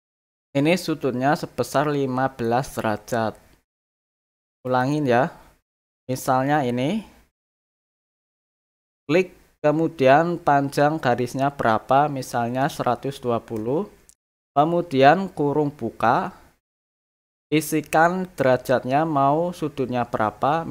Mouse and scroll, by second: 4.6 click, 8.8 click.